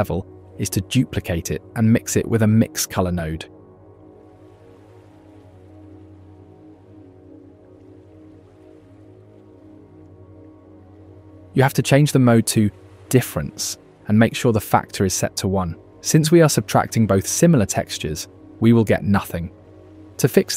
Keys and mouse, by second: 1.9 click, 2.0-3.2 middle drag, 3.6 middle click, 4.0 shift+d, 6.4 shift+a, 11.2-12.3 drag, 13.8-14.6 drag, 15.8 click, 19.0 middle click, 20.0 middle click.